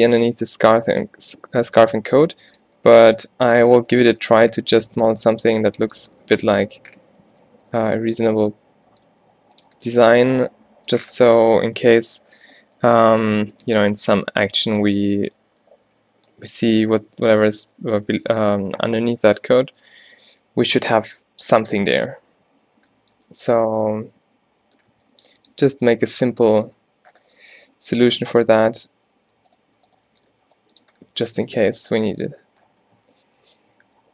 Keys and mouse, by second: 2.1 e, 5.2 shift+Tab, 5.3 g, 6.2 Tab, 6.7 Tab, 9.1 g, 9.8 Tab, 11.9 Tab, 14.1 g, 14.5 click, 24.2 e, 25.0 click, 25.6 e, 26.6 click, 29.3 shift+Tab, 30.4 g, 31.5 Tab.